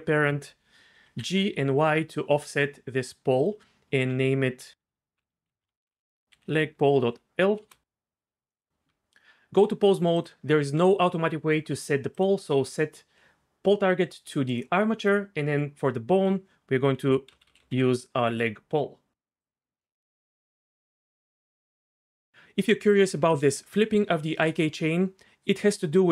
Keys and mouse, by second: 1.0 g, 1.3 y, 3.4 click, 4.0 F2, 8.9 Tab, 12.1-14.6 drag, 16.1-19.5 drag.